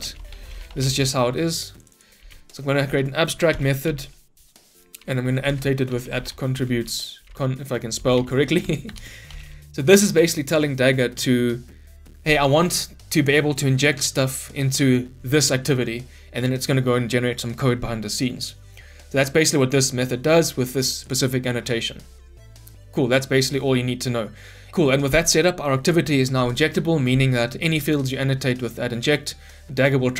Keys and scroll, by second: 2.1 ctrl+c, 2.8 ctrl+v, 8.9 Return.